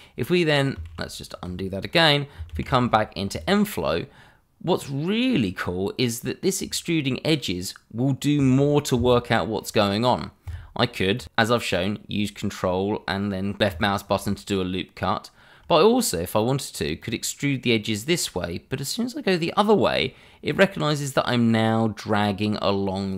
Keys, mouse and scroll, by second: 0.5 middle click, 0.9 ctrl+z, 2.5 alt+4, 3.3 click, 6.8 scroll up 1, 13.6 click, 17.0 click.